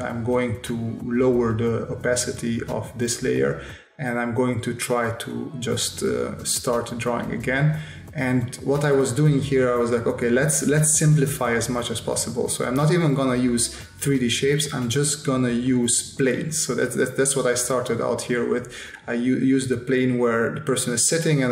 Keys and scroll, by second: 1.3 space, 1.9 s, 5.3 space, 6.5 space, 7.5 space, 10.8 space, 13.1 space, 15.2 space, 17.5 space, 19.4 space.